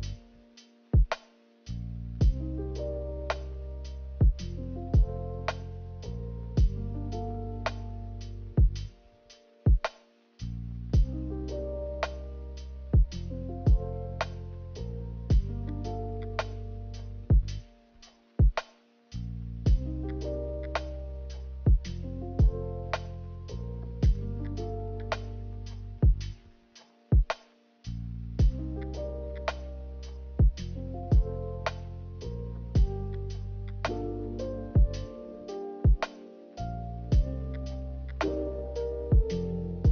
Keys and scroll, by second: 0.0 a, 4.4 b, 6.2 b, 8.8 ctrl+z, 13.4 ctrl+z, 15.2 b, 24.9 a, 28.2 a, 31.3 5, 32.4 b, 35.0 a, 37.2 ctrl+z, 37.4 ctrl+z, 37.5 ctrl+z.